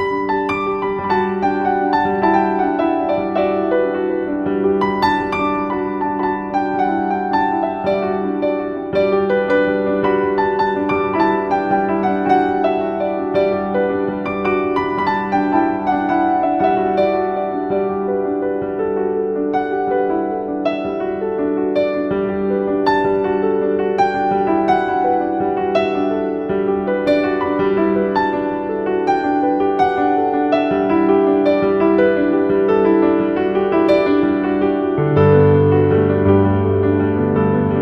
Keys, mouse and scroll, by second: 1.9-3.6 middle drag, 3.6 click, 4.2-4.7 shift+middle drag, 4.7-5.0 scroll up 4, 5.7-6.9 shift+middle drag, 6.9 Tab, 7.8-9.1 shift+middle drag, 9.1 ctrl+r, 17.2-17.7 scroll up 1, 17.7 shift+middle click, 18.7-19.4 scroll up 2, 19.4-21.0 shift+middle drag, 21.0-23.6 scroll up 1, 23.6 scroll up 1, 25.8-27.4 drag, 27.4 alt+z, 28.3 click, 30.2 s, 36.8-37.8 drag.